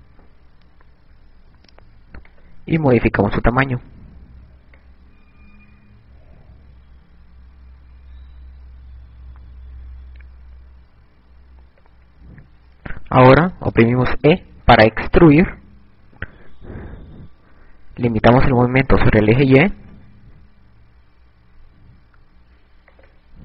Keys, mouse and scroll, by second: 0.3 Tab, 2.6 click, 3.9 click, 15.7 e, 22.5 click.